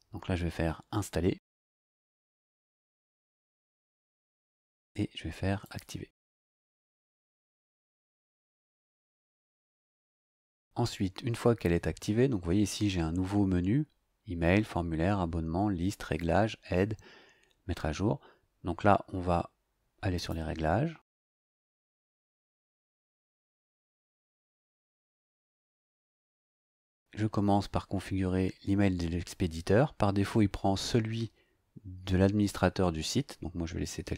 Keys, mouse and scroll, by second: 1.6 click, 5.6 click, 20.1 click.